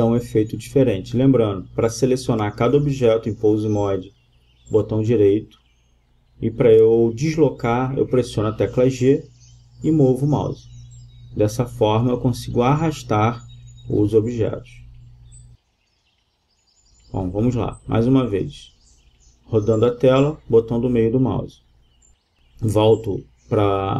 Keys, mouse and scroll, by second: 1.7 g, 2.8-4.6 middle drag, 6.3-7.7 middle drag, 7.9-8.8 middle drag, 9.4 g, 11.1-12.8 right drag, 11.9 g, 12.8-13.8 middle drag, 15.6-16.3 middle drag, 16.3 g, 16.6-18.1 middle drag.